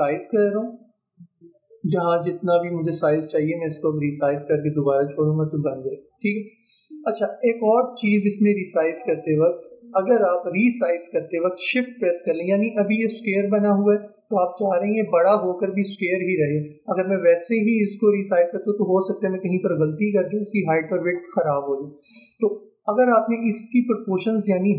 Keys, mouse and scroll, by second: 8.8 ctrl+z, 11.8-14.6 drag, 17.8-22.2 drag, 22.3 ctrl+z.